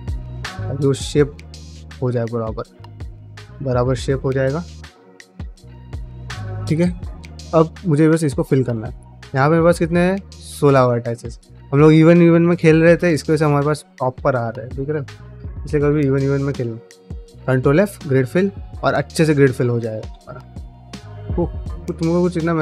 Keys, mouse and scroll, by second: 0.0 middle click, 0.3 g, 1.0 middle click, 1.5 g, 2.1 middle click, 2.4 1, 2.7 click, 3.1 click, 4.4 g, 4.9 click, 5.0 g, 5.4 click, 5.5 g, 5.9 middle click, 6.3 g, 6.7 middle click, 7.0 middle click, 7.4 shift+middle click, 7.6 middle click, 7.8 2, 8.2-10.0 alt+drag, 17.0 ctrl+f, 18.2 middle click, 19.6 middle click, 20.8 middle click, 21.8 middle click.